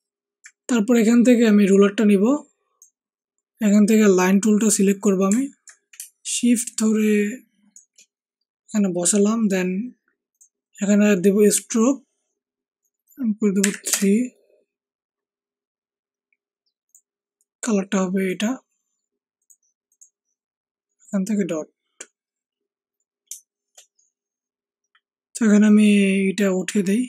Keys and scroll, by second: 13.6 Up, 13.9 Return.